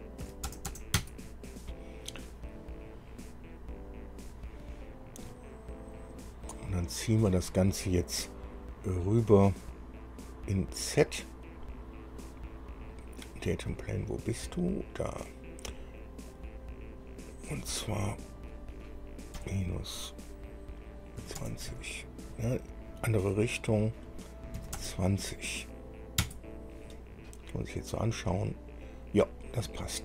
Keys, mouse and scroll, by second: 0.5 KP_2, 0.7 KP_0, 0.9 KP_0, 1.2 KP_Enter, 5.5-7.3 drag, 7.3 middle click, 10.2-11.3 drag, 13.0 scroll up 1, 13.6-14.2 scroll down 2, 14.6 click, 16.5-17.6 drag, 18.5 click, 19.6 KP_Subtract, 21.4 KP_2, 21.6 KP_0, 21.9 Tab, 23.9 click, 24.8 KP_2, 25.0 KP_0, 26.4 KP_Enter, 27.5-30.0 middle drag.